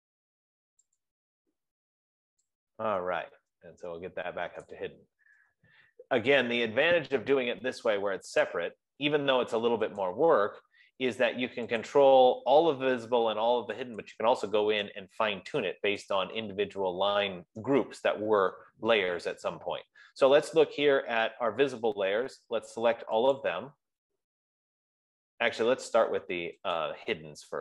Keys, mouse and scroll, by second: 0.2 click, 1.4 shift+click, 3.3 5, 4.9 click, 8.2 click, 8.8 click, 10.6 click, 12.2 click, 14.6 click, 16.3 click, 23.9 click, 27.3 click.